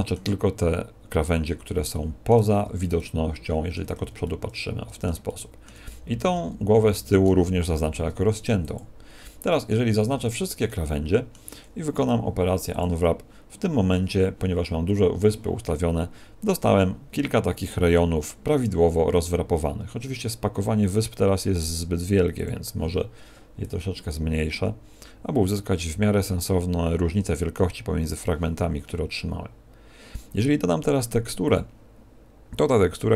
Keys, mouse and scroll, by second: 1.8 shift+middle click, 2.6 c, 4.2 middle click, 5.2 shift+middle click, 5.8 middle click, 7.8 ctrl+e, 9.4 middle click, 9.8 a, 10.1 a, 10.6 middle click, 11.9 u, 20.8 click, 23.6 click, 31.4 click.